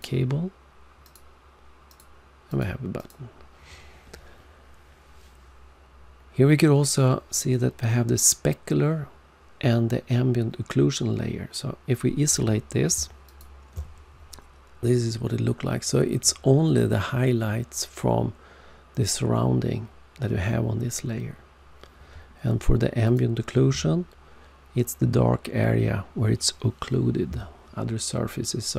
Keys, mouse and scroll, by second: 1.0 click, 1.8 click, 2.4 click, 2.9 click, 13.2 alt+click, 23.0 alt+click.